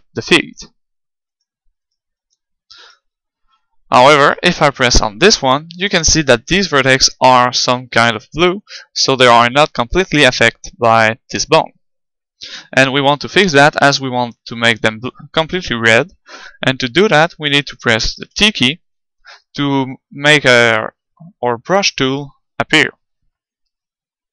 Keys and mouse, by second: 0.0-4.6 right drag, 4.2-7.5 middle drag, 8.2-10.2 middle drag, 18.3 t, 18.8 n.